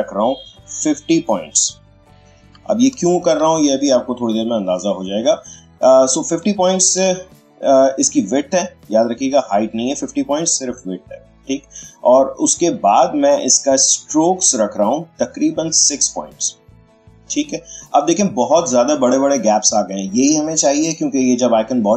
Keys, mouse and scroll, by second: 2.2 typing, 3.3 Return, 5.9-10.2 ctrl+drag, 13.8 click.